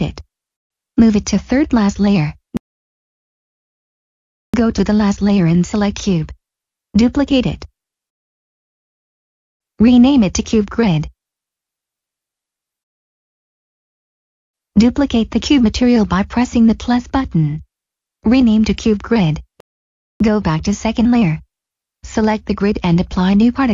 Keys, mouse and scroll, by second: 0.7 m, 3.4 click, 4.7-5.3 scroll down 1, 5.3 click, 5.7 middle click, 6.3 scroll down 1, 6.7 middle click, 7.1 scroll down 1, 7.5 d, 8.0 right click, 9.4 click, 10.7 typing, 11.1 Return, 13.1 click, 17.0 click, 18.1 click, 19.7 Return, 20.4 click.